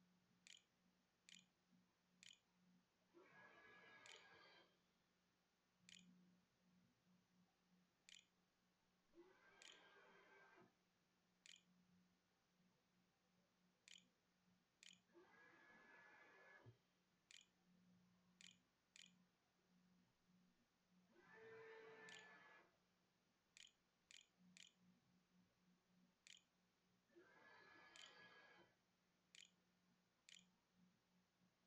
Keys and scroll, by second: 0.0-14.6 typing, 3.9 Tab, 14.0 shift+Up, 16.2-18.5 typing, 20.6 Tab, 21.7 Tab, 24.4 shift+Caps_Lock, 24.6-31.5 typing.